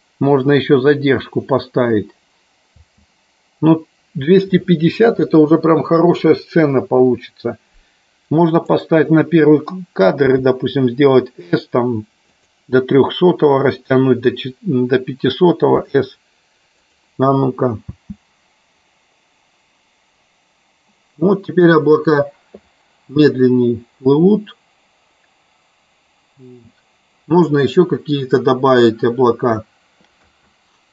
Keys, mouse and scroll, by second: 2.7 space, 8.6 click, 12.4 click, 17.9 space, 30.2 space.